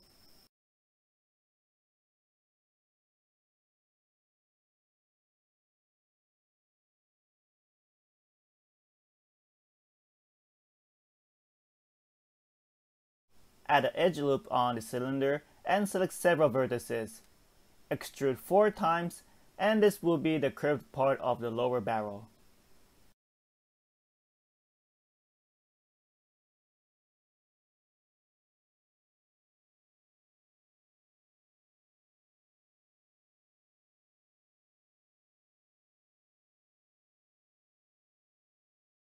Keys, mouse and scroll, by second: 5.9 Tab, 6.7 alt+z, 7.1 click, 7.6-7.9 scroll down 1, 7.9 shift+middle click, 12.3 scroll up 1, 12.7 middle click, 13.6 ctrl+r, 15.4-15.8 scroll up 4, 15.8 shift+middle click, 16.4 g, 18.6 click, 19.2 r, 19.4 e, 24.9 e, 32.4 click, 32.8 g, 37.5 click, 38.0 g.